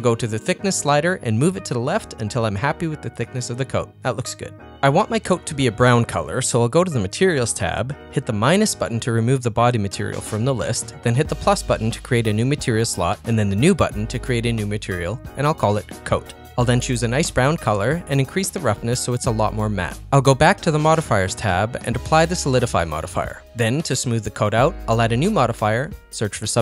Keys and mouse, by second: 0.7-4.4 drag, 4.8 z, 14.8 click, 15.2 click, 15.5-16.7 drag, 17.7 click, 19.4-20.7 drag, 22.1 click, 22.6-23.8 drag, 24.3-26.6 drag.